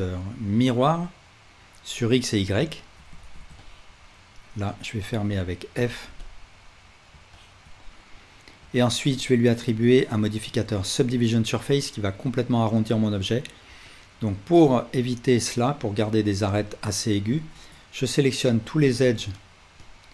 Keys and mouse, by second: 2.3 right click, 2.8-4.8 alt+middle drag, 3.2 alt+z, 4.8-19.0 drag, 5.8 f, 8.6 Tab, 17.5 Tab, 18.4 2, 19.4 shift+click, 19.8 shift+click.